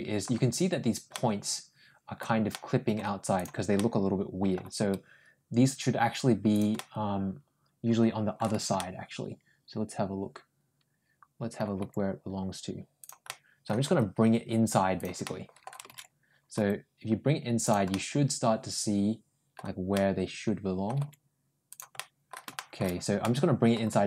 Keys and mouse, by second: 0.9-2.0 middle drag, 2.3 middle click, 3.2 click, 3.6 middle click, 4.6 g, 6.6-8.2 middle drag, 8.6-11.4 ctrl+middle drag, 11.6 ctrl+g, 13.1 middle click, 13.7 g, 15.1 middle click, 16.4 ctrl+g, 17.8-19.4 middle drag, 19.8 middle click, 20.8 g, 21.8 middle click, 22.4 middle click, 23.1 middle click, 23.8 g.